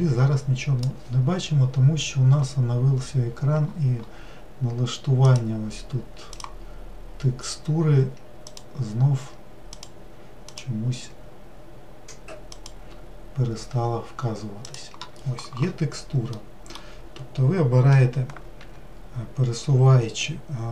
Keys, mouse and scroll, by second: 18.6 g.